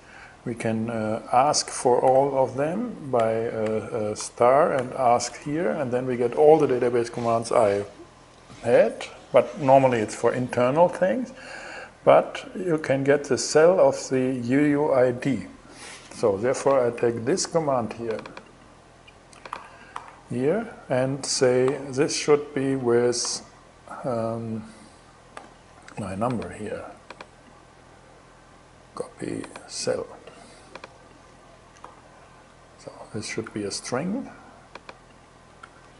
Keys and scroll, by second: 1.6 shift+3, 2.1 alt+shift+3, 2.3 alt+shift+Left, 3.8 alt+shift+Left, 4.8 shift+', 4.9 shift+Return, 19.1 super+c, 19.5 super+v, 20.3 alt+super+v, 21.3 alt+g, 22.8 super+v, 24.9 super+z, 31.4 super+v, 32.5 shift+super+v, 33.0 shift+2, 35.2 shift+2.